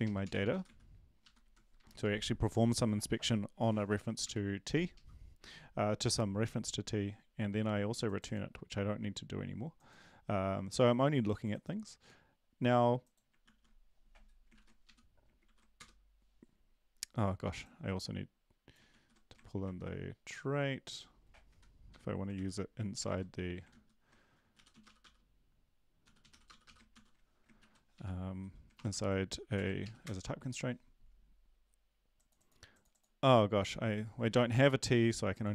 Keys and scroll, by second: 13.4 ctrl+s, 14.6 ctrl+`, 14.8 Up, 15.4 ctrl+l, 15.8 Return, 18.9 ctrl+x, 19.6 ctrl+`, 22.3 Right, 22.3 ctrl+v, 23.0 ctrl+z, 23.7 ctrl+z, 24.9 typing, 26.3-27.0 typing, 27.6 ctrl+`, 27.9 Up, 28.7 BackSpace, 28.9 BackSpace, 29.5 ctrl+l, 29.8 Up, 30.0 Return, 34.2 ctrl+`.